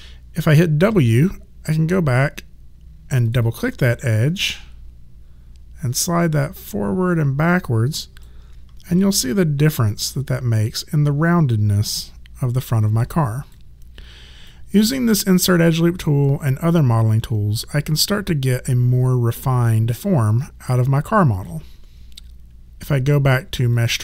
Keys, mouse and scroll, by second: 0.8 w, 3.2 click, 4.4 1, 6.1 click, 8.9 3, 9.9 click, 14.5 alt+click, 23.7 click.